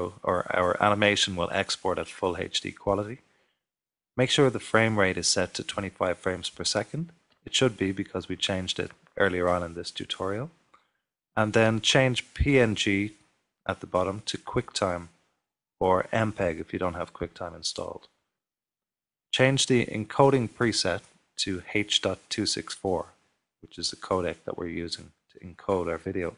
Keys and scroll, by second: 25.6 0.